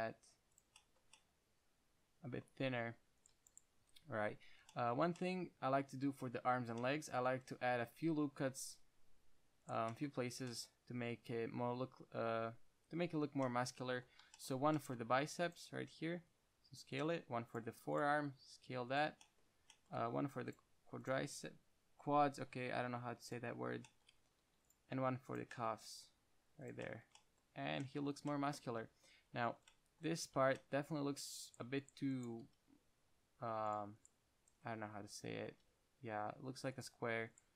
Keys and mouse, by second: 0.9 click, 1.3 Tab, 2.9 Tab, 8.6 ctrl+r, 15.5 ctrl+r, 16.5 s, 17.3-17.8 drag, 17.6 ctrl+r, 18.5 s, 20.5 ctrl+r, 21.6-23.4 drag, 21.6 s, 23.6 click, 24.2-25.6 drag, 24.7 ctrl+r, 26.2 s, 27.0 click, 27.3 Tab, 29.5 KP_1, 30.7 Tab, 32.7 g, 35.8 g, 37.1-37.5 drag.